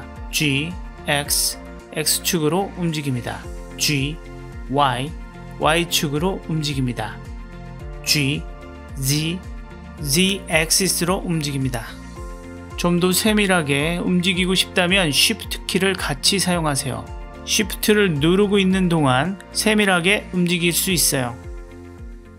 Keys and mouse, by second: 0.8 x, 3.6 g, 4.3 y, 7.6 g, 8.6 z, 14.3 g.